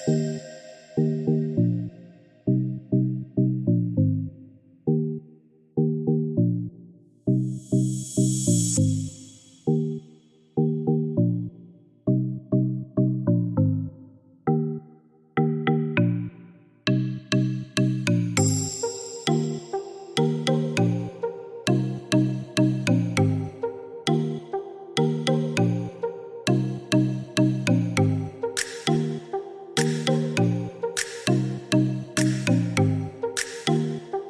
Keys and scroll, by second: 9.5-10.3 typing, 15.8-16.7 typing, 29.0 Escape.